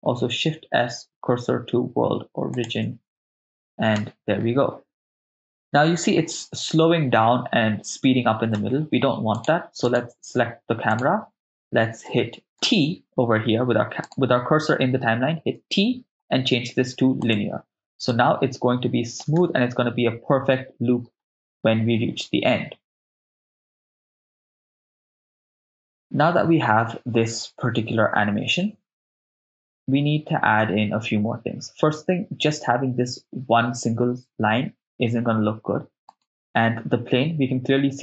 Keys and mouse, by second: 0.3 shift+s, 4.0 shift+space, 8.5 shift+space, 9.4 right click, 9.9 click, 10.9 click, 10.9 right click, 12.6 t, 15.5 t, 18.1-19.2 drag, 19.4 shift+space, 30.6 shift+space, 36.2 click, 36.2 right click.